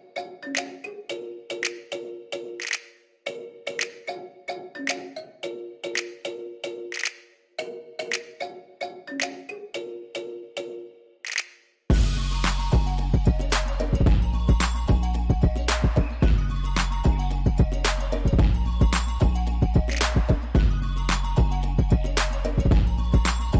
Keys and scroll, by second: 5.9 \, 14.9 \, 19.4 Tab.